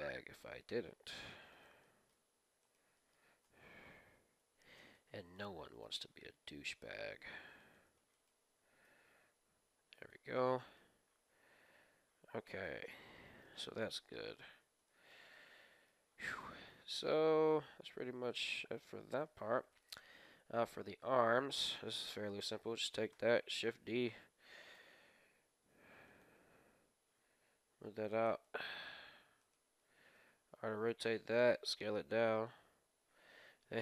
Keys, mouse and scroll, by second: 1.8-4.5 middle drag, 2.6-4.2 right drag, 3.4 KP_1, 4.3 g, 8.1-9.8 right drag, 8.8 g, 10.0 g, 10.3-12.5 middle drag, 12.8 middle click, 13.8 middle click, 13.8 KP_1, 14.6 scroll down 1, 14.8-18.5 middle drag, 18.9 scroll up 1, 19.2-21.2 middle drag, 19.7-22.8 right drag, 21.9 KP_1, 23.0 right click, 23.2 shift+d, 24.7 r, 26.8 g, 28.2-28.6 scroll up 1, 28.6-30.3 middle drag, 29.4-31.1 right drag, 30.1 r, 31.1 s, 32.4 middle click, 32.5-33.8 scroll down 1.